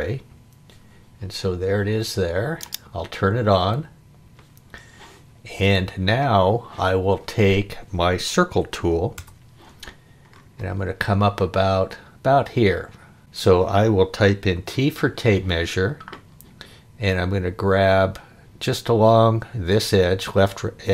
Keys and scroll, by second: 9.1 c, 13.2 space, 14.5 t.